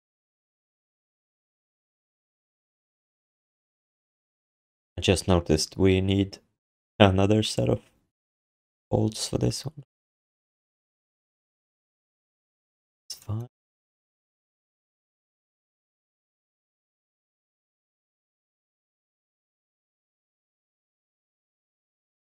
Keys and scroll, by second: 3.1 q, 3.7 alt+shift+d, 4.0 ctrl+s.